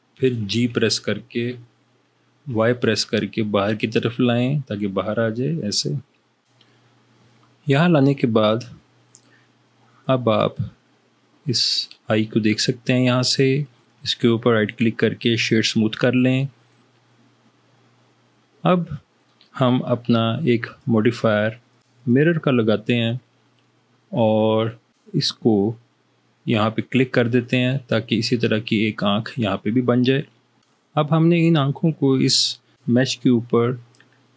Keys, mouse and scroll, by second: 0.8 g, 2.6 y, 6.5 y.